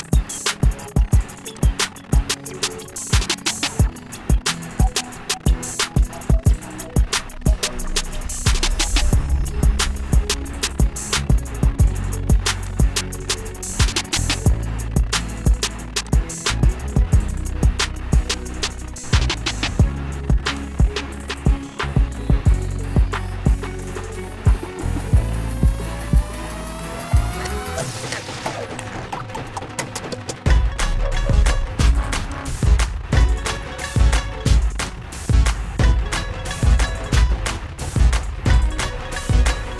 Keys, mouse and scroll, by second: 4.7 click, 8.8 click, 14.1 click, 17.5 click, 20.9 click, 22.5 click, 24.4 Delete, 27.4 click, 32.6-37.5 drag.